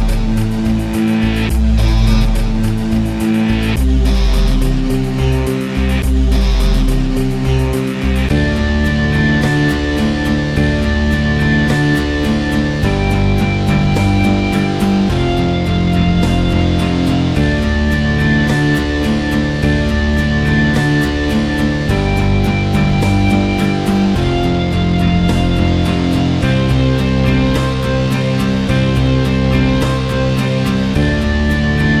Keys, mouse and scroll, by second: 0.0 alt+click, 0.7 q, 1.0 q, 1.2-2.8 drag, 2.8 scroll down 2, 2.8 alt+click, 3.3 alt+middle click, 3.4 alt+click, 3.7 scroll down 1, 3.7 alt+click, 4.1 s, 4.4 alt+click, 4.5 scroll down 1, 4.7 click, 5.1 scroll up 4, 5.3-6.0 alt+drag, 6.3 click, 6.4 middle click, 6.5 shift+a, 7.5 middle click, 7.6 q, 7.8 middle click, 8.0 n, 8.8-9.5 scroll down 7, 9.0 alt+click, 9.2 alt+middle click, 9.5 alt+middle click, 9.5 click, 9.7 KP_Decimal, 9.9-10.4 alt+drag, 10.4 scroll up 1, 10.7 alt+middle click, 10.8 alt+click, 11.3 c, 11.5-12.1 drag, 13.2 middle click, 13.3 shift+a, 14.1 alt+g, 14.4 s, 14.7 click, 15.3 middle click, 15.5 alt+click, 16.0 alt+right click, 16.3 alt+middle click, 16.5 alt+click, 17.1 r, 17.6 alt+middle drag, 17.7 alt+click, 17.8 KP_Decimal, 18.0 scroll up 4, 18.2 alt+middle click, 18.3-20.5 alt+drag, 20.5 middle click, 20.6 scroll down 4, 20.8 alt+middle click, 21.0 alt+click, 21.2 alt+middle drag, 21.4 alt+right click, 21.6 click, 22.0 KP_0, 22.3 alt+click, 22.4 scroll up 1, 22.7 alt+click, 22.8 alt+right click, 23.6 scroll down 2, 23.9 click, 24.3 z, 24.5 alt+middle click, 24.7 alt+click, 24.8 alt+right click, 25.0 alt+middle click, 25.1 alt+click, 26.9 r, 27.8-28.8 drag, 29.5 click, 30.7 alt+middle click, 30.8 alt+click, 31.3 alt+right click, 31.8 alt+click.